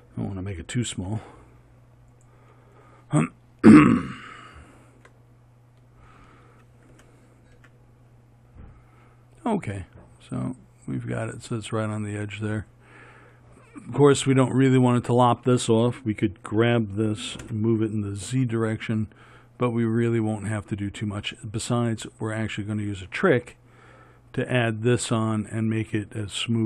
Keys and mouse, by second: 1.3 g, 5.6-7.1 middle drag, 7.1 g, 16.7 g.